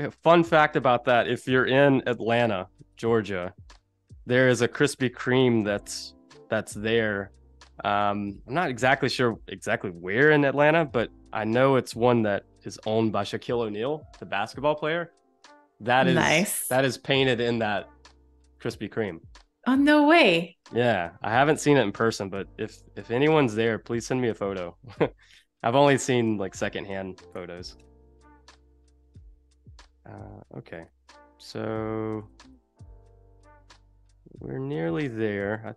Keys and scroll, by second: 1.4 super+c, 20.2 super+f, 20.4 v, 23.1 super+7, 27.4 Delete, 28.0 space, 32.2 a.